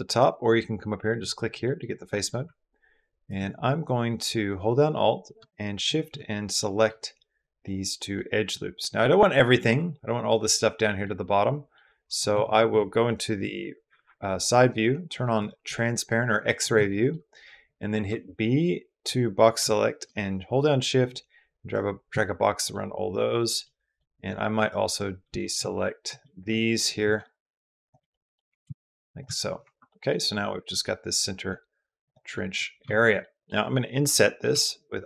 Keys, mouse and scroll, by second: 1.4 middle click, 1.9 middle click, 5.5 alt+shift+click, 6.4 middle click, 7.4 middle click, 7.9 middle click, 9.3 middle click, 10.2 middle click, 10.8 middle click, 13.2 KP_1, 16.7 shift+click, 18.2 n, 19.4 b, 22.5 middle click, 23.4 middle click, 25.9 shift+b, 26.3 middle click, 26.8 b, 27.9 click, 28.3 b, 29.4 Escape, 29.7 click, 30.1 click, 31.8 middle click, 32.1 click, 32.6 shift+middle click, 33.0 click, 34.3 i.